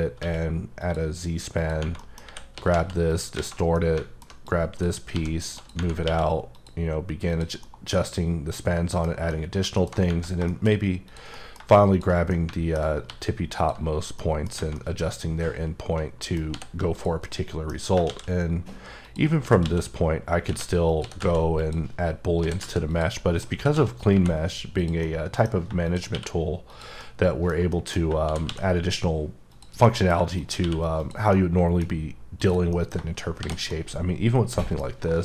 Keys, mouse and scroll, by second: 0.2 q, 0.8 click, 2.0 middle click, 2.2-3.3 typing, 3.1 click, 3.7 middle click, 4.4 click, 5.1 g, 5.5 click, 6.0 q, 6.5 click, 7.3 click, 7.6 middle click, 9.0-9.6 scroll down 2, 9.3 middle click, 10.5 middle click, 11.0 click, 11.3 scroll up 1, 11.9 shift+click, 12.3 middle click, 13.0 g, 13.5 click, 14.2 middle click, 14.5 scroll down 1, 14.7 middle click, 16.5 h, 16.9 click, 17.2 middle click, 18.0 shift+a, 19.0 click, 19.4-21.2 typing, 20.8 click, 21.6 click, 22.4-24.1 typing, 22.9 click, 23.1 middle click, 24.8 click, 25.0 middle click, 25.8 shift+click, 26.1 q, 26.6 click, 27.0 middle click, 27.7 middle click, 28.2 shift+d, 28.5 x, 29.5 click, 29.8 middle click, 30.4 shift+click, 30.6 q, 31.0 click, 31.3 middle click, 32.4 click, 32.7 middle click, 33.4 shift+h, 33.7 middle click.